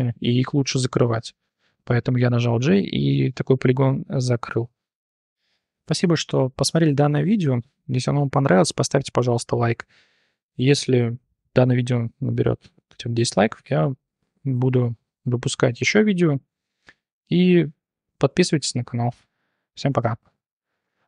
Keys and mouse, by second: 1.5 j, 2.9-3.6 drag, 20.9 alt+F9.